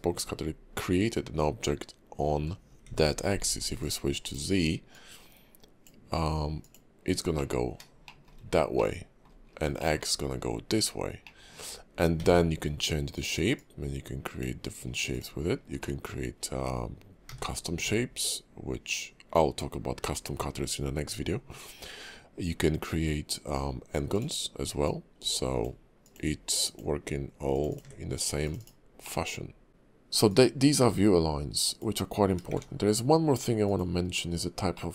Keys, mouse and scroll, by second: 2.9 shift+v, 4.2 right click, 4.9 click, 7.3 middle click, 8.0 shift+middle click, 8.4 scroll up 3, 8.8 middle click, 9.4 scroll down 4, 9.8 middle click, 11.2 middle click, 12.2 d, 13.5 click, 15.1 click, 15.5 scroll down 3, 15.8 middle click, 16.2-17.3 scroll up 2, 17.3 d, 24.8 click, 28.6 click, 29.0 middle click, 30.3 click, 30.8 x, 32.5 shift+a, 34.3-34.8 scroll down 2, 34.8 middle click.